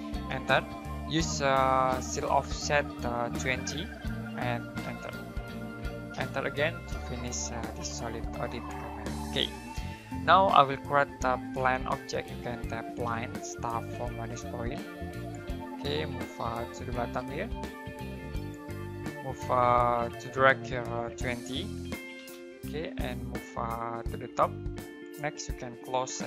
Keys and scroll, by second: 0.3 space, 3.7-4.8 typing, 6.1-7.4 typing, 11.1-11.9 typing, 21.2-22.1 typing, 26.1-26.2 typing.